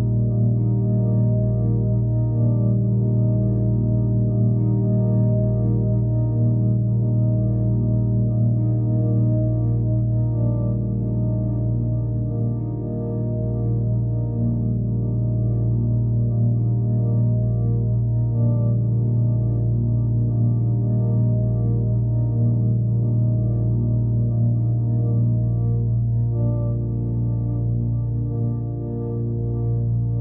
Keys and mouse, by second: 0.9 alt+drag, 4.3-4.9 drag, 5.8 click, 6.1 click, 6.9 typing, 8.3 click, 9.2 click, 9.8 click, 10.4 typing, 10.8 shift+click, 12.0 click, 12.7 click, 13.4 click, 15.1-16.1 drag, 17.9-20.8 drag, 24.3 click, 25.3 click, 26.8 ctrl+alt+click, 28.2 click.